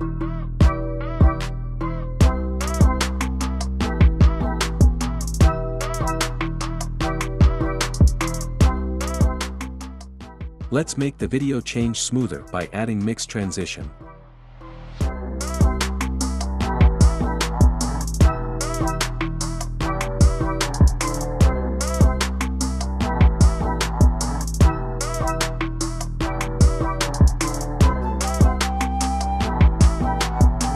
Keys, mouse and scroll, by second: 3.4 click, 3.7 space, 7.1 space, 8.3 click, 13.5 click, 17.1 click, 20.3 click, 26.7 click, 28.9 click, 30.5 click.